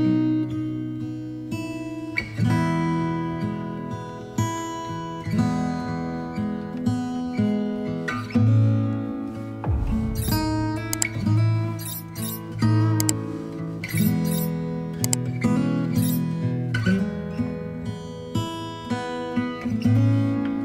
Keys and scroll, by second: 0.0 ctrl+j, 9.3 ctrl+z.